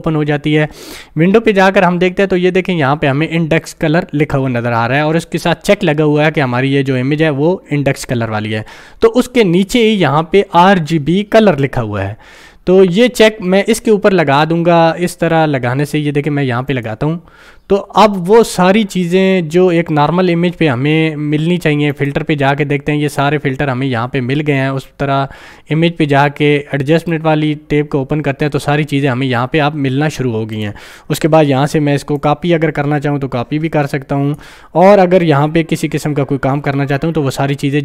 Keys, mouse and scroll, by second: 16.7 ctrl+click, 21.9 ctrl+click, 30.6-36.7 ctrl+drag.